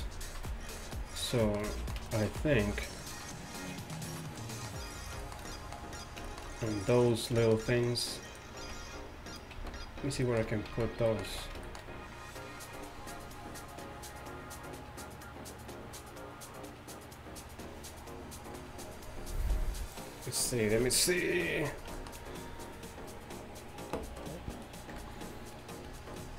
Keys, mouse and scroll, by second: 6.1-7.1 middle drag, 7.5 middle drag, 8.3-11.1 right drag, 8.7 z, 9.6 z, 10.8 z, 11.2 middle click, 11.4 z, 25.0 KP_3.